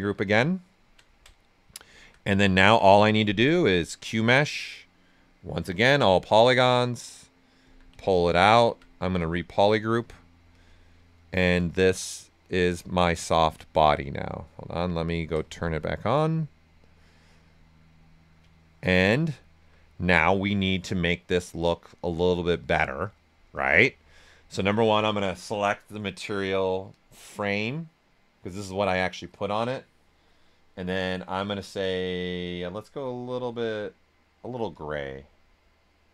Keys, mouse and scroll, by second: 0.7 alt+right click, 4.1 space, 6.3-9.4 drag, 9.4 ctrl+right click, 10.5 click, 11.0 ctrl+right click, 11.8 shift+f, 12.0 right click, 13.4-16.7 drag, 17.2 right click, 24.0-25.5 alt+right drag, 25.3 click, 25.5 click, 32.9-36.1 drag.